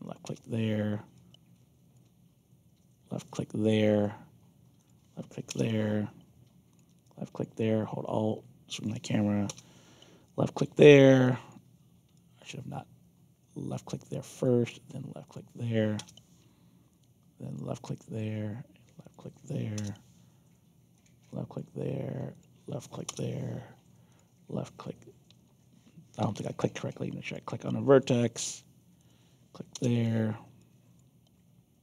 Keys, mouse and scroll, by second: 0.0 click, 0.2 Return, 1.1 alt+click, 3.2 click, 3.6 alt+click, 4.7 click, 6.7 click, 7.0 alt+click, 8.7 click, 9.4 Return, 10.2 alt+click, 11.2 alt+click, 12.1 alt+click, 13.6 click, 14.1 alt+click, 15.2 click, 15.9 Return, 17.4 click, 17.8 alt+click, 19.0 click, 19.7 Return, 20.9 click, 21.2 alt+click, 22.3 click, 23.0 Return, 24.0 click, 26.2 z, 27.2 click, 27.6 alt+click, 28.9 click, 29.7 Return, 30.5 alt+click.